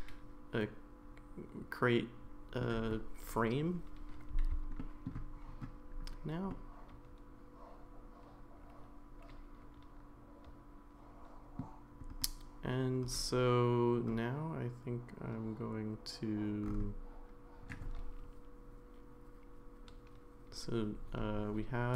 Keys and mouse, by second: 4.8 shift+middle click, 6.5-11.6 middle drag.